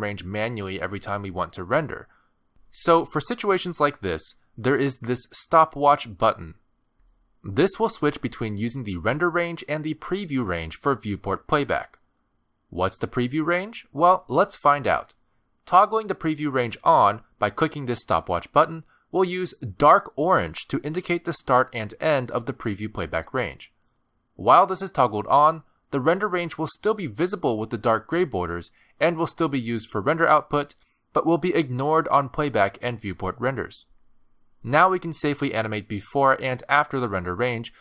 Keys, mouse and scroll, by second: 3.9 click, 16.1 click, 24.8 click, 28.9 click, 34.0 space.